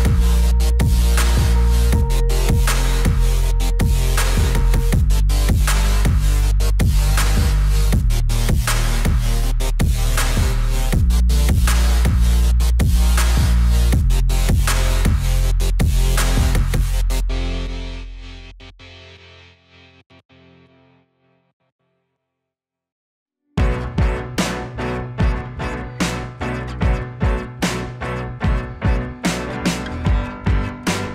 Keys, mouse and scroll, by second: 2.9 click, 2.9 click, 5.7 click, 6.8 click, 6.9 Down, 8.6 click, 13.7 click, 16.8 Up, 17.8 click, 20.1 click, 22.0 Down, 24.9 click, 25.9-26.6 scroll down 1, 27.7 click, 27.9 Down, 28.9 click, 29.3-30.0 scroll up 1, 30.0 click.